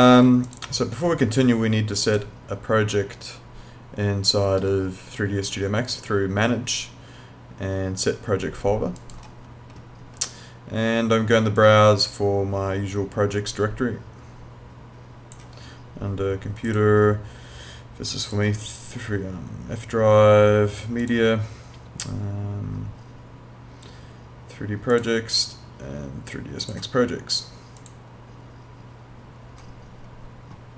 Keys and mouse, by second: 9.0 click, 11.6 click, 16.7 click, 21.0 click, 24.9 click.